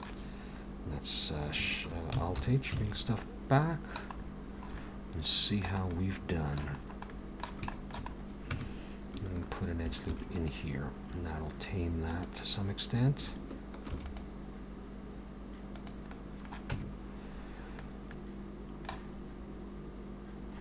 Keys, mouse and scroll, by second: 2.4 alt+h, 2.8 alt+a, 3.2 middle click, 4.2-4.8 scroll up 5, 4.8 middle click, 5.9 middle click, 6.8-7.6 scroll up 2, 7.1 middle click, 7.7 shift+middle click, 8.1-8.5 scroll up 2, 8.5 Tab, 9.8 ctrl+r, 13.9 ctrl+r, 16.1 middle click, 16.7 Tab, 17.3-17.8 scroll down 3, 17.9 middle click, 18.9-19.9 scroll up 1.